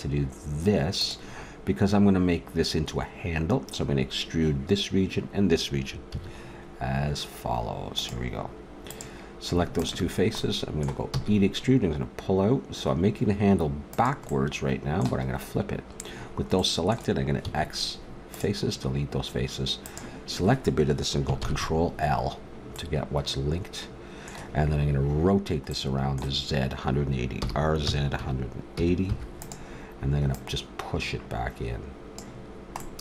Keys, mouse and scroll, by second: 6.1 a, 7.9-9.7 right drag, 9.7 click, 10.4-12.4 middle drag, 11.1 e, 14.5 click, 17.4 x, 19.8-21.4 right drag, 21.4 ctrl+l, 27.4 r, 30.4 click.